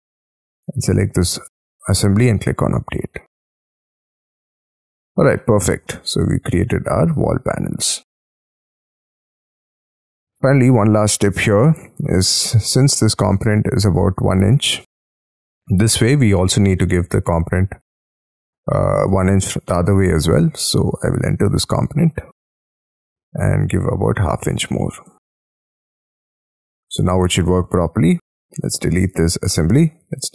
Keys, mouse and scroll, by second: 4.4 middle click, 4.6-5.4 scroll down 9, 4.8 space, 5.4 middle click, 5.9-6.6 scroll down 15, 6.6 scroll up 1, 6.7 scroll down 4, 7.0-7.8 scroll up 20, 7.8 middle click, 11.0-11.5 scroll up 13, 11.5 middle click, 12.0 t, 16.0 space, 16.3 t, 19.4 middle click, 20.5 space, 20.9 double click, 21.4 double click, 21.7 double click, 22.6-25.3 typing, 25.0 Return, 25.5 Escape, 25.7 Escape, 26.0-26.5 scroll down 15, 26.7 middle click, 27.1-27.8 scroll down 19, 28.3-29.0 scroll down 14, 29.0 Delete, 29.5 middle click, 30.2 Escape.